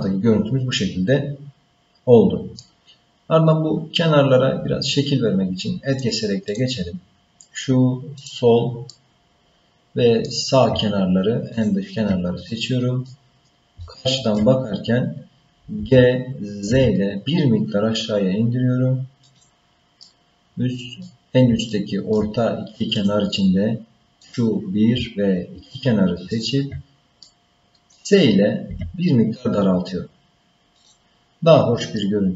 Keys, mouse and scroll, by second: 5.9 click, 6.5 click, 8.2 click, 8.9-10.3 middle drag, 11.5 shift+click, 12.6 middle click, 13.3-13.8 scroll down 3, 13.8 shift+middle click, 14.6-15.3 scroll up 2, 15.8 g, 20.0-21.1 middle drag, 21.7 shift+middle click, 22.9 click, 24.2 click, 26.3 shift+click, 27.2 middle click, 28.7 s, 31.2-31.7 scroll down 3, 32.0 middle click.